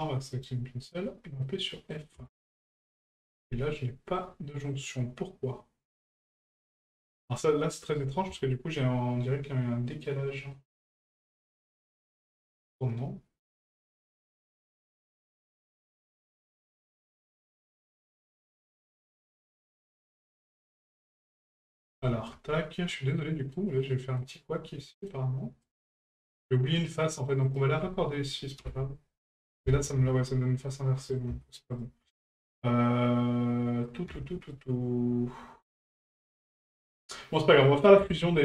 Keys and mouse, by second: 0.3 right click, 1.4 middle click, 3.7 middle click, 10.5-20.6 middle drag, 20.9-21.4 shift+middle drag, 22.0 shift+middle drag, 22.9-23.5 middle drag, 24.2-25.1 middle drag, 25.6 right click, 26.3 shift+right click, 26.8 shift+right click, 27.4 shift+right click, 30.7 middle click.